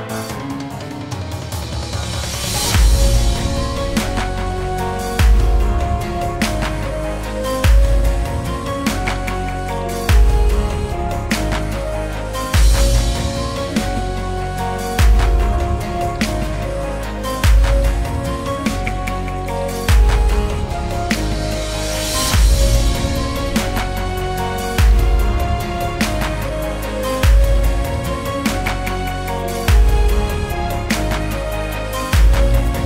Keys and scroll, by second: 9.6 space, 9.8 space, 13.4 ctrl+z, 18.2-19.7 typing, 23.0 v, 24.3 v, 26.3 v.